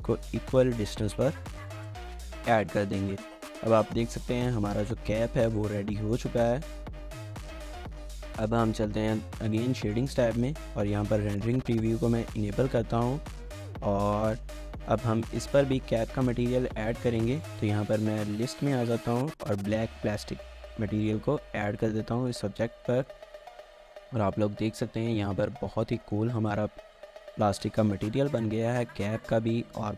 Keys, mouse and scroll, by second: 1.5 scroll down 2, 1.8 shift+middle click, 2.9 shift+scroll down 1, 3.1 shift+middle click, 7.0 scroll up 1, 8.3 scroll down 1, 8.6 shift+middle click, 9.9 double click, 10.3-10.9 scroll up 2, 10.5 shift+middle click, 10.9 z, 12.3-12.9 scroll down 1, 12.9 z, 13.1 shift+middle click, 13.9 scroll up 1, 14.1 shift+middle click, 14.4-15.1 scroll up 1, 15.2 shift+middle click, 15.6-16.1 scroll up 2, 20.8 middle click, 22.1 scroll down 1, 22.3 shift+middle click, 24.1-24.5 scroll up 1, 24.7 shift+middle click, 25.1-25.6 scroll up 1, 26.0 shift+middle click, 29.7 scroll down 1.